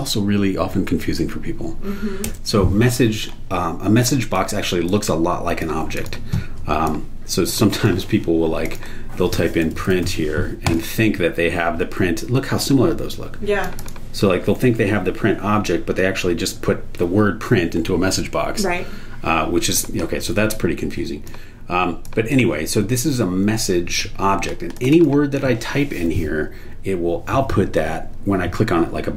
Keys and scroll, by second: 0.0-0.3 typing, 2.2 Return, 9.4-10.5 typing.